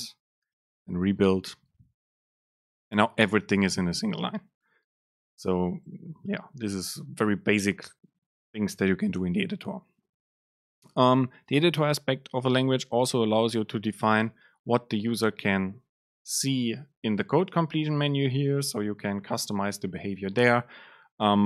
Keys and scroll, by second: 0.6 ctrl+shift+super+F9, 17.4 super+space.